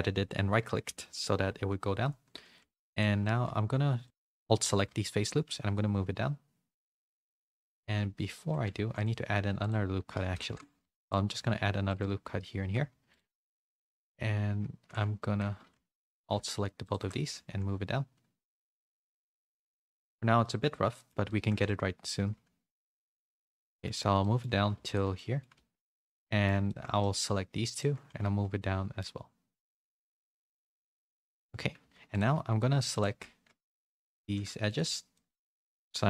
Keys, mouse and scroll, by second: 0.8 KP_1, 1.4 z, 2.5 3, 2.9 alt+click, 4.0 alt+shift+click, 5.0 z, 5.4 g, 8.7 ctrl+r, 10.4 ctrl+z, 10.8 ctrl+r, 11.5 ctrl+r, 12.6 2, 13.1 alt+shift+click, 15.8 3, 15.9 click, 16.8 click, 17.2 g, 18.7 z, 19.0 middle click, 19.7 shift+middle click, 20.4 middle click, 20.9 middle click, 21.2 middle click, 21.6 middle click, 23.1 g, 23.1 middle click, 23.8 middle click, 24.2 middle click, 24.7 3, 24.8 click, 25.1 middle click, 25.4 g, 26.2 middle click, 26.6 shift+middle click, 27.0 middle click, 27.7 click, 28.0 g, 30.8 middle click, 31.8 2, 32.1 click, 34.1 ctrl+z, 35.1 middle click, 35.5 middle click, 35.9 middle click.